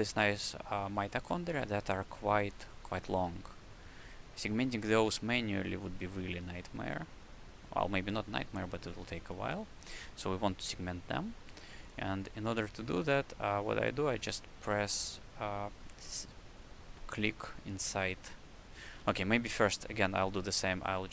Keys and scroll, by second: 19.0 c, 19.4 q.